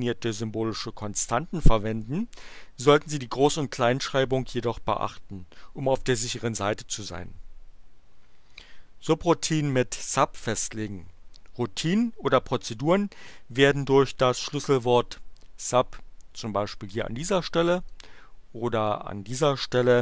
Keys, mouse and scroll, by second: 15.9 click, 17.9-19.0 drag.